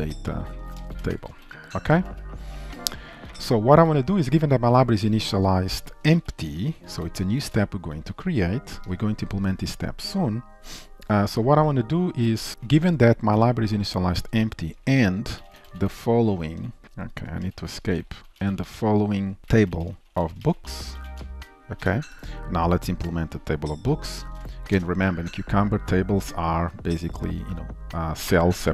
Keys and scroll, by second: 2.2 ctrl+s, 7.5 ctrl+s, 16.8 Escape.